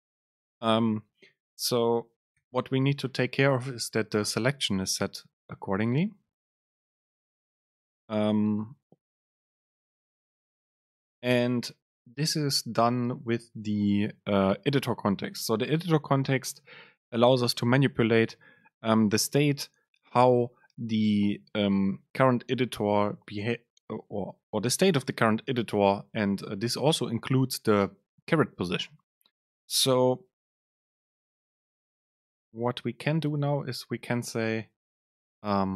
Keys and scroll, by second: 0.0 BackSpace, 2.4 super+z, 11.5 Return, 31.5 Down.